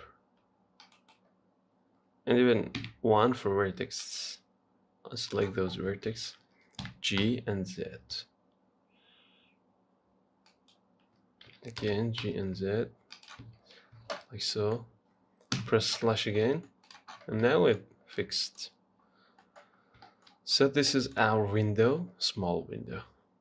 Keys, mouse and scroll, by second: 3.2 1, 3.7-4.3 scroll down 1, 4.3 click, 5.9 scroll up 4, 6.3 shift+middle click, 7.0 g, 11.7 g, 13.7 z, 14.0-14.8 scroll down 6, 14.2 Tab, 14.8-15.8 middle drag, 15.8 KP_Divide, 16.4 scroll down 4, 16.7 middle click, 17.1 click, 17.4 scroll down 3, 17.7 middle click, 18.0-18.4 scroll up 2, 18.4 middle click, 18.9-19.3 scroll down 2, 19.3-19.6 scroll up 1, 19.6 middle click, 20.0 scroll down 3, 20.3 shift+middle click, 20.6-21.1 scroll up 3, 21.1-23.0 middle drag, 23.0-23.4 scroll down 1.